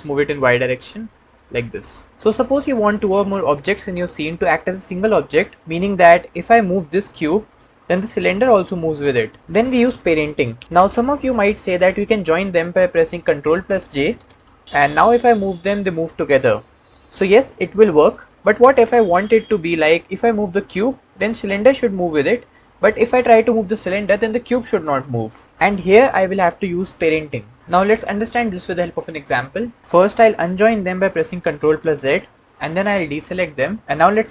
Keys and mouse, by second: 0.4 y, 1.2-2.1 drag, 7.3-7.7 drag, 8.3 g, 9.1 click, 13.3 click, 14.6 ctrl+j, 15.3 g, 31.7 ctrl+z.